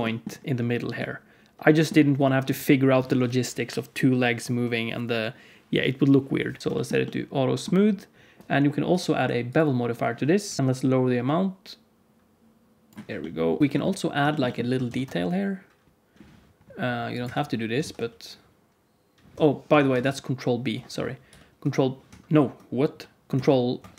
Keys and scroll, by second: 6.6 alt+shift+z, 10.4 KP_Decimal, 13.6 Tab, 14.8 ctrl+r, 17.7 s, 20.0 ctrl+z, 21.2 ctrl+b, 23.4 ctrl+e.